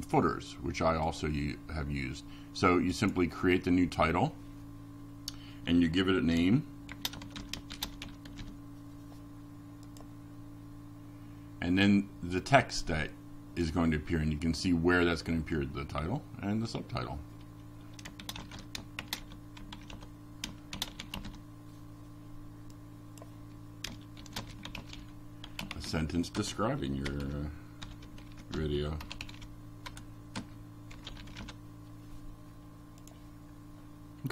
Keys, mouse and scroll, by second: 1.2-2.6 drag, 6.3-9.8 typing, 10.7 click, 11.8-19.3 typing, 20.1 click, 24.9 click, 27.6 click, 30.1-32.1 drag.